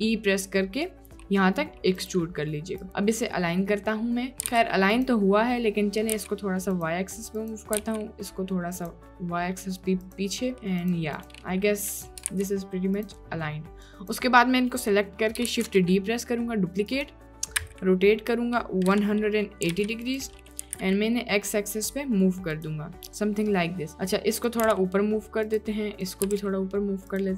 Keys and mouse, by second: 3.5 click, 4.2 click, 4.4 g, 6.2 g, 7.8 g, 9.1 click, 10.5 click, 10.6 g, 11.2 click, 11.5 click, 11.8 click, 12.3 ctrl+d, 12.9 click, 13.9 click, 15.6 shift+d, 17.6 r, 20.7 g, 24.7 g, 26.0 click, 26.3 g.